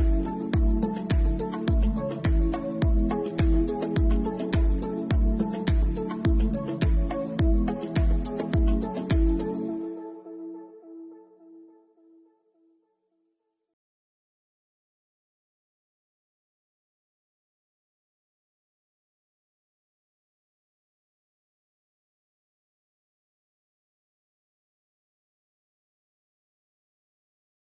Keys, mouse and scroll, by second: 1.2 alt+click, 1.2 scroll up 2, 1.6 middle click, 2.7-3.4 scroll up 5, 3.2 middle click, 4.9 scroll down 4, 5.2 scroll down 3, 6.0 middle click, 6.3 shift+middle click, 6.7 middle click, 7.0-7.6 scroll up 3, 8.1 alt+shift+click, 8.7-9.0 scroll down 5, 9.5 shift+middle click, 10.2 middle click, 10.7 shift+middle click, 11.1 middle click, 12.8 alt+shift+click, 15.1 middle click, 18.4 middle click, 18.8 scroll up 2, 20.6-21.1 scroll up 5, 21.1 alt+shift+click, 21.7 middle click, 22.6 alt+shift+click, 22.9 middle click, 23.5 alt+shift+click, 23.9-24.6 scroll down 5, 24.6 middle click, 25.0 shift+middle click, 25.3 middle click, 26.7 c.